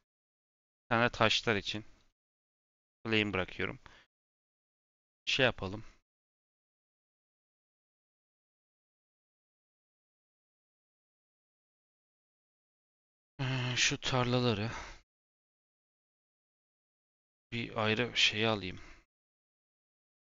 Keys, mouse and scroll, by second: 0.3 shift+d, 1.6 shift+click, 2.2 g, 3.5 middle click, 3.8 scroll down 5, 4.0 click, 4.2 h, 5.5-7.5 scroll up 23, 7.5 click, 9.8 click, 11.8 KP_7, 12.2-12.8 scroll down 1, 12.8 click, 13.7 shift+middle click, 14.3 click, 14.9 click, 15.7 g, 16.4-17.8 shift+drag, 18.5 shift+middle click, 18.7-19.1 scroll up 6, 19.2-20.3 shift+middle drag.